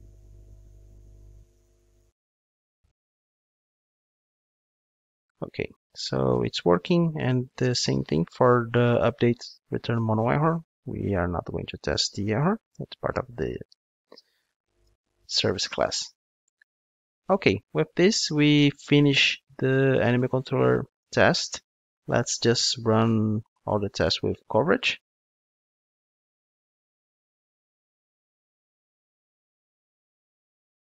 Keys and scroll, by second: 14.9 alt+super+l.